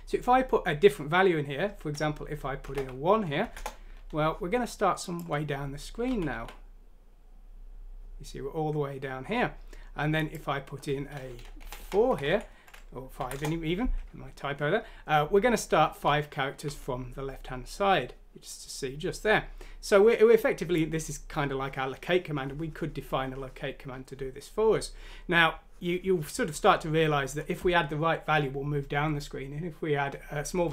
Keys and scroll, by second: 2.9 1, 3.4 F6, 3.5 Return, 6.0-6.4 typing, 12.4 shift+5, 13.2 F6, 13.4 typing, 16.0-16.6 typing.